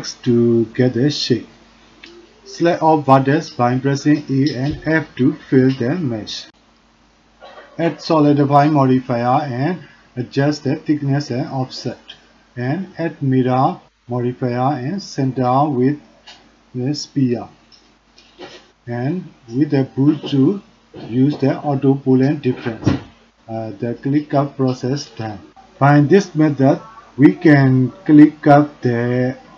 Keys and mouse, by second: 0.1 click, 0.8 ctrl+shift+b, 4.1 e, 5.4 a, 6.1 f, 7.0 click, 7.3 shift+z, 7.5 middle click, 7.6 shift+click, 7.8 middle click, 7.9 Tab, 8.2 click, 9.6 click, 10.4 click, 11.0 click, 11.6 click, 12.1-12.5 middle drag, 13.3-15.0 drag, 15.1 middle click, 17.5 middle click, 18.3 click, 18.5 click, 18.5 right click, 19.2 shift+click, 19.4 click, 19.4 right click, 21.9 shift+click, 23.5 click, 24.0 click, 24.0 right click, 24.4 click, 24.4 right click, 24.7 click, 24.7 right click, 25.8-29.5 middle drag.